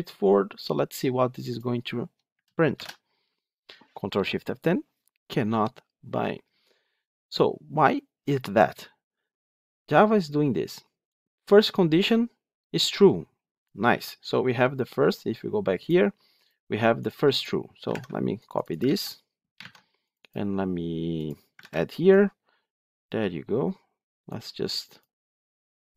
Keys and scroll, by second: 2.6 ctrl+shift+F10, 18.8 ctrl+c.